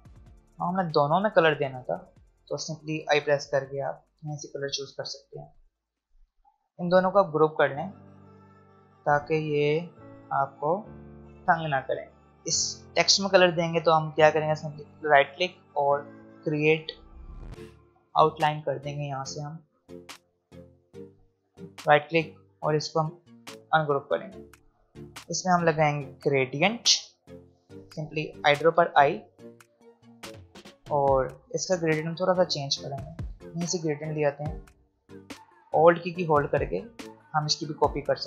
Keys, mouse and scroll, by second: 1.6 shift+click, 3.0 i, 4.1 click, 6.2 v, 7.5 click, 9.9 shift+click, 11.5 click, 12.2 alt+scroll up 1, 12.4 click, 15.5 right click, 18.2 click, 21.6 right click, 23.5-28.4 drag, 24.9-26.2 drag, 28.7 i, 29.4 click, 31.3 v, 34.0-38.2 drag.